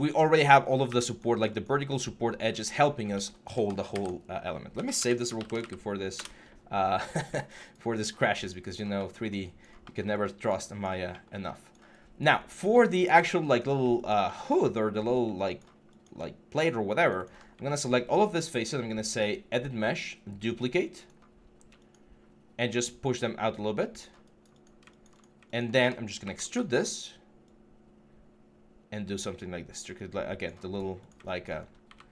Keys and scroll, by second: 0.7 q, 2.3 1, 3.7 ctrl+s, 4.6-5.4 typing, 6.0 Return, 26.0 ctrl+e.